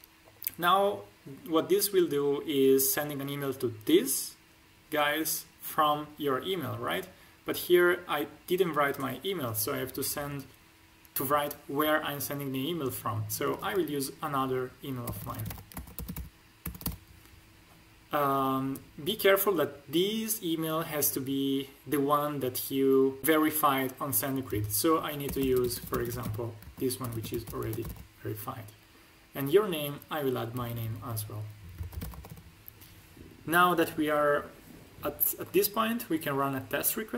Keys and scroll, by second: 15.0-16.7 typing, 15.6 ctrl+alt+`, 17.8 h, 25.2-27.8 typing, 26.6 ctrl+alt+`, 30.5 BackSpace, 31.7 shift+p, 31.9 o, 32.1 l, 32.2 o.